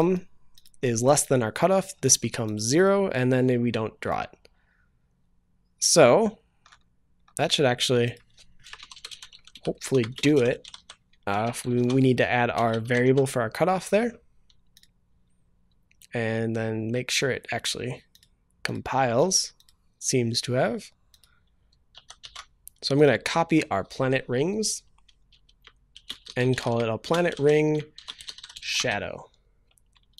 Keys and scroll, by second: 11.8 ctrl+s, 13.4 ctrl+s.